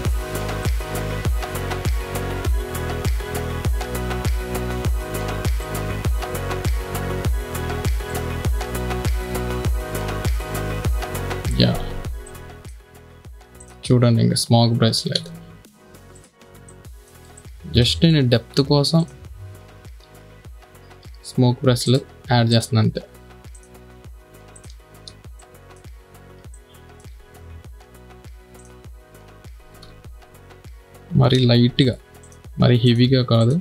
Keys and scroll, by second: 15.6 ctrl+z, 16.5 space, 20.1 ], 25.3 space, 30.3 ctrl+z, 31.8 4.